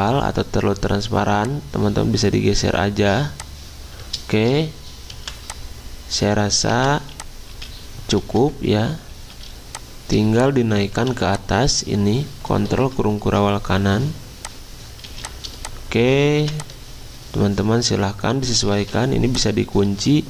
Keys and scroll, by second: 5.3 v, 6.9 v, 7.5 z, 8.2 ctrl+z, 9.3 z, 10.9 v, 16.4 v, 18.8 ctrl+2.